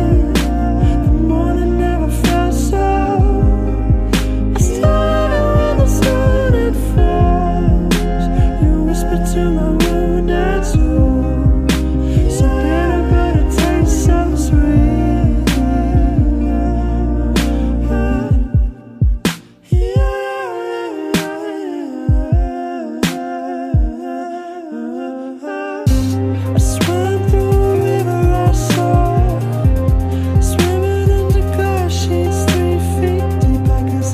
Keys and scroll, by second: 0.2 ctrl+z, 6.0 ctrl+z, 6.3 ctrl+z, 6.8 ctrl+z, 7.0 ctrl+z, 7.2 ctrl+z, 8.1 ctrl+z, 9.4 ctrl+z, 10.6 ctrl+z, 13.8 ctrl+z, 14.5 ctrl+z, 14.8 ctrl+z, 15.2 ctrl+z, 15.5 ctrl+z, 15.8 ctrl+z, 16.4 ctrl+z, 17.1 ctrl+z, 17.4 ctrl+z, 17.8 ctrl+z, 18.0 ctrl+z, 18.3 ctrl+z, 19.3 ctrl+z, 20.2 ctrl+z, 20.8 alt+space, 21.5 ctrl+z, 21.7 ctrl+z, 22.0 ctrl+z, 22.4 alt+w, 23.3 ctrl+z, 23.8 ctrl+z, 26.9 ctrl+z, 28.4 ctrl+z, 30.7 ctrl+z, 31.8 ctrl+z.